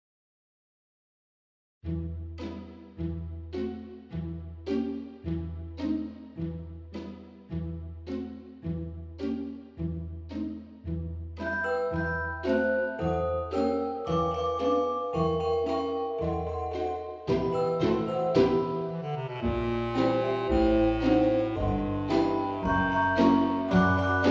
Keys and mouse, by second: 0.5 click, 0.9 Tab, 2.3 shift+middle click, 3.7 click, 4.7 middle click, 4.8 Tab, 5.3 click, 5.7 l, 6.5 shift+d, 6.8 x, 7.8 click, 8.5 KP_7, 9.4 z, 10.2 r, 11.0 click, 11.5 g, 11.8 click, 12.0 Tab, 12.7 middle click, 13.2 alt+z, 13.3 middle click, 14.4 click, 15.3 shift+middle click, 17.1 middle click, 18.3 F6, 18.6 click, 19.4 s, 20.2 right click, 20.7 s, 21.1 y, 23.3 click, 23.7 middle click, 24.1 Tab.